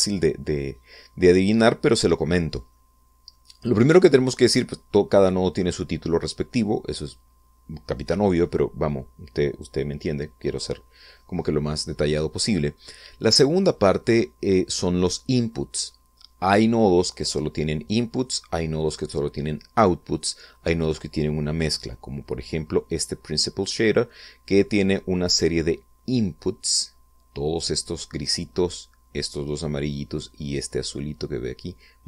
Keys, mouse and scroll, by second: 0.2-1.9 middle drag, 3.2 middle click, 13.3-15.7 middle drag, 22.5-25.6 middle drag, 31.2 middle click.